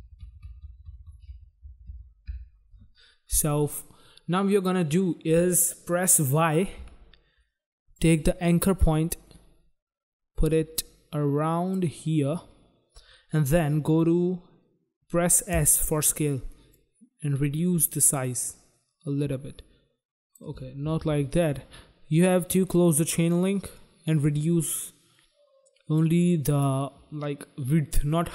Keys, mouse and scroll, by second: 1.7 Up, 1.9 Up, 2.3 Up, 4.6 click, 4.7 click, 6.8 y, 7.9 click, 15.3 s, 16.7 click, 21.1 ctrl+z, 22.8 click, 22.9 click, 23.4 click.